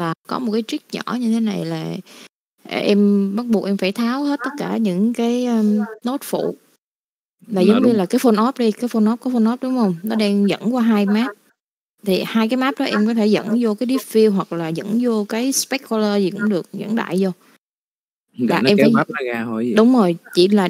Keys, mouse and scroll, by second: 0.0 click, 1.3 middle click, 2.3 click, 3.3 click, 4.5 click.